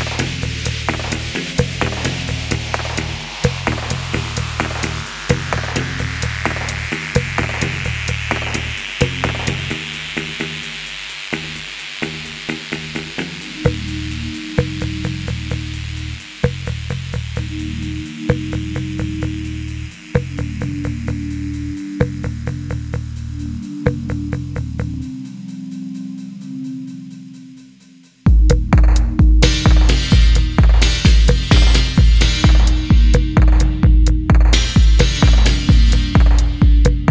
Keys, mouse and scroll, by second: 0.1 middle click, 0.9 shift+click, 1.1 middle click, 2.2 typing, 3.4-5.6 scroll down 1, 5.6-6.7 typing, 7.1 middle click, 7.3 scroll up 1, 7.5 middle click, 7.9-10.4 typing, 15.2 middle click, 17.1-17.6 scroll down 1, 17.6 middle click, 19.4-19.9 scroll up 1, 20.0 shift+middle click, 20.2-20.6 shift+scroll down 2, 20.6 middle click, 21.2-21.6 scroll down 1, 21.6 middle click, 23.1 shift+middle click, 26.4 middle click, 28.0-28.5 scroll up 1, 28.5 middle click, 30.8 typing, 32.7-33.5 typing, 33.9 middle click, 35.3 typing, 35.6-36.2 scroll down 1, 36.3 shift+middle click.